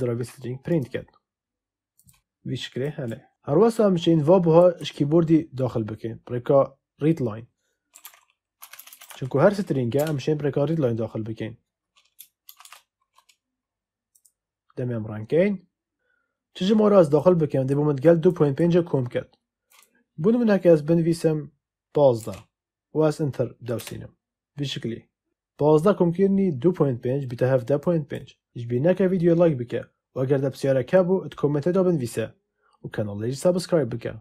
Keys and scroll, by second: 7.6-9.5 typing, 9.9 Return, 12.4 shift+1, 22.1 1, 22.4 5, 23.7 Return.